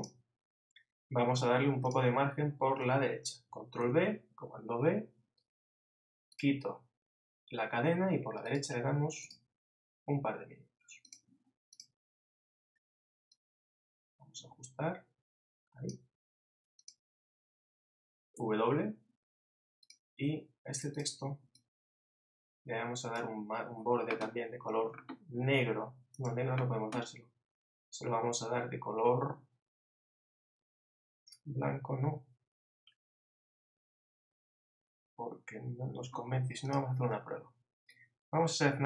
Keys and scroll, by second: 3.8 super+b.